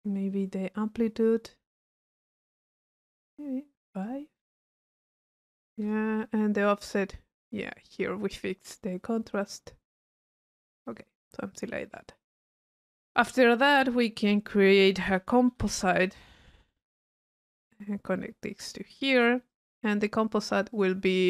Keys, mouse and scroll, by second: 3.2 click, 4.0 click, 6.6-10.6 drag, 11.0 middle click, 11.6 click, 13.4 middle click, 14.2 right click, 14.7 click, 15.1 c, 17.0 click, 18.5-19.4 drag, 19.5 click, 19.9 click, 20.4 click, 20.7 click.